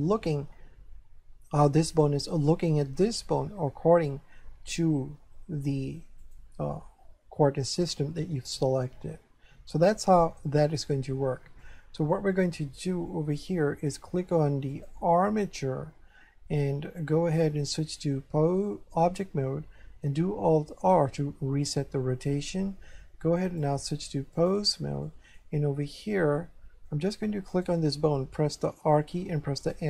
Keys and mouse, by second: 1.9 right click, 6.2 click, 11.6 shift+middle click, 13.1 shift+middle click, 14.7 click, 18.0 click, 20.9 alt+r, 23.4 click, 25.0 shift+middle click, 26.4 middle click, 27.5 right click, 28.7 r, 29.6 right click.